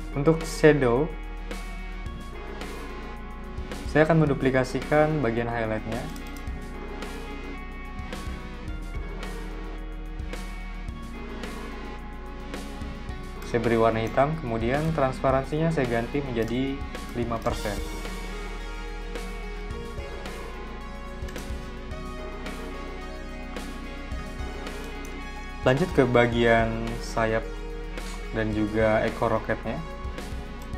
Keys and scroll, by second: 7.1 super+c, 7.6 super+v, 17.4 5, 18.2 shift+5, 18.6 Return, 23.6 z, 24.4 v, 29.6 z, 30.1 v.